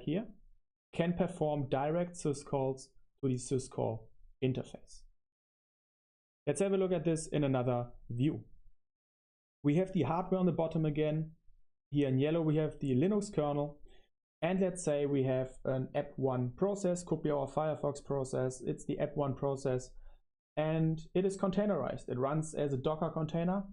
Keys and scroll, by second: 6.4 super+3, 7.0-16.8 typing, 16.9 super+1.